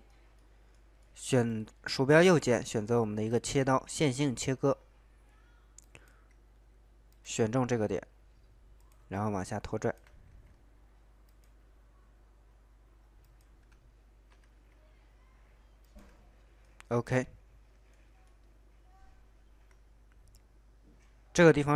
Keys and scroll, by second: 10.3 ctrl+z, 14.5 ctrl+z.